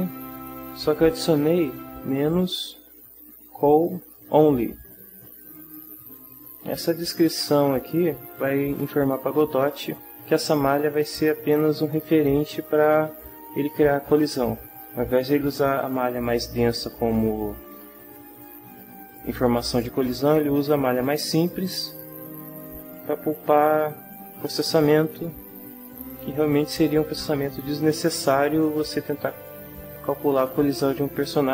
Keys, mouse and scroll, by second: 0.9 click, 1.4 click, 2.6 Left, 5.7 click, 25.8 Tab, 27.2-28.5 middle drag, 29.7 middle click.